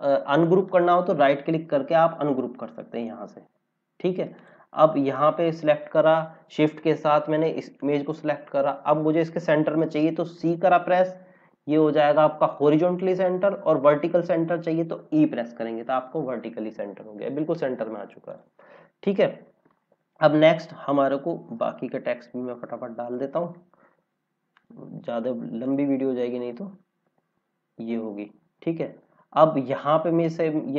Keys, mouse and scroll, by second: 4.3 click, 7.7 click, 10.4 c, 15.0 e, 16.5 scroll down 1, 18.2 click, 18.7-19.2 scroll down 1, 21.5 click, 23.7 ctrl+c, 27.0 ctrl+v, 28.5 scroll up 1.